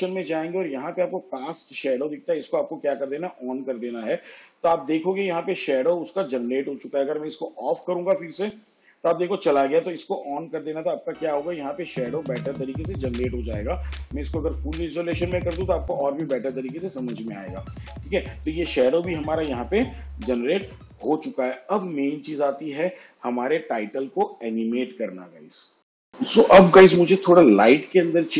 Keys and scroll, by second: 19.8 shift+/.